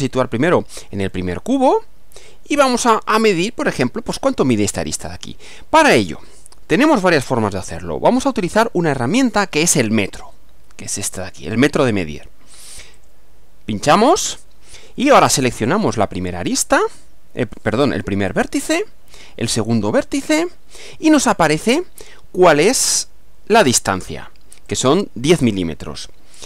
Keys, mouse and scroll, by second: 1.1-3.1 shift+middle drag, 12.9 click, 18.3 click, 20.3 click, 22.7-23.7 middle drag, 24.7 click.